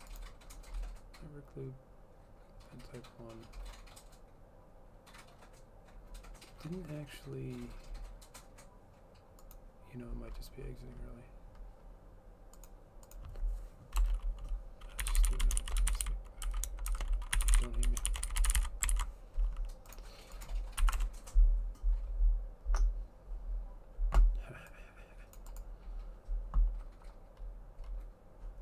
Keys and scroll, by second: 14.2 Return, 14.9-19.2 typing, 21.1 Up, 21.2-21.9 typing.